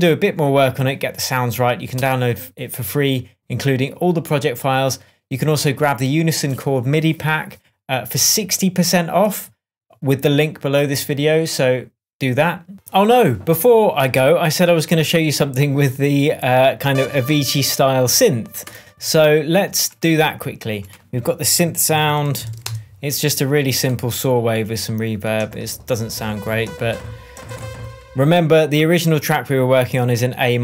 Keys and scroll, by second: 21.5 super+r, 22.0-23.0 typing.